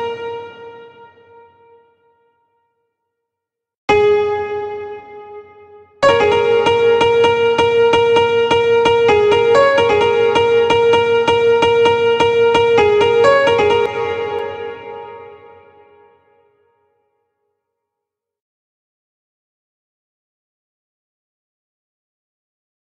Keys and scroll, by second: 13.2 space, 22.5 space.